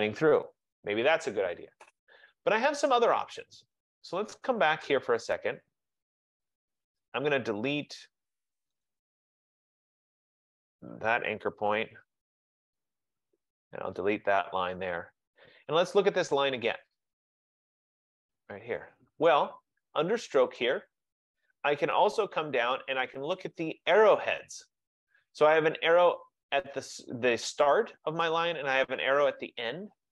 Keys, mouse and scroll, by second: 4.9 click, 5.4 click, 7.2 click, 8.9 click, 10.7 click, 11.6 BackSpace, 13.2 click, 13.6 BackSpace, 17.0 click, 18.6 click, 20.8 click, 28.4 click, 29.1 click, 29.8 click.